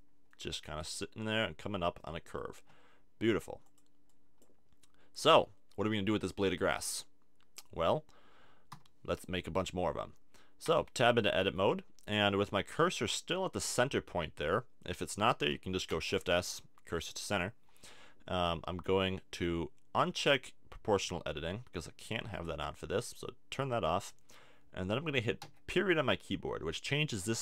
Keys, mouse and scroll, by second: 3.5 click, 4.4-5.4 drag, 5.9-7.6 middle drag, 8.7 KP_7, 10.6 Tab, 11.4 a, 12.5-14.3 middle drag, 15.9 shift+s, 20.4-22.3 drag, 25.4 ..